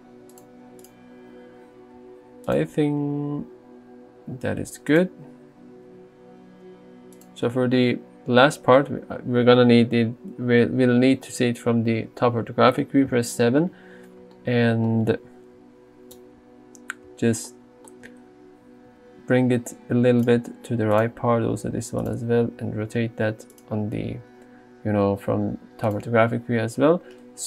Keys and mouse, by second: 2.0 r, 2.6 click, 2.7 g, 4.9 click, 5.9 r, 7.2 click, 13.2 KP_7, 13.2 KP_0, 14.1 middle click, 15.6 KP_7, 16.3 right click, 18.9 g, 20.3 click, 21.0 click, 21.2 g, 22.5 r, 23.6 click.